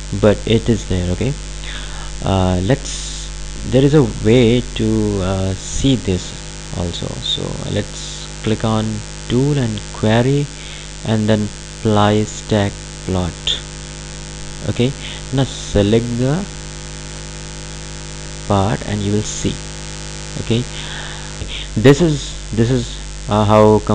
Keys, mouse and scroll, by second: 5.7 click, 9.3 click, 12.3 click, 16.0 click, 21.3-23.0 scroll down 1.